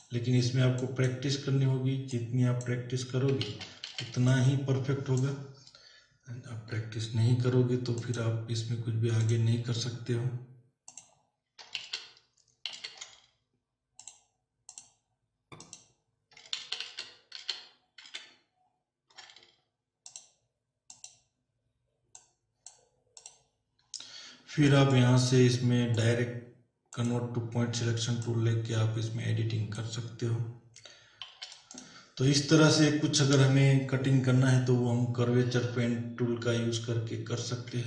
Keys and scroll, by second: 3.5 ctrl+z, 6.7 p, 11.8 ctrl+alt+z, 12.7 ctrl+alt+z, 16.6 ctrl+alt+z, 31.2 z.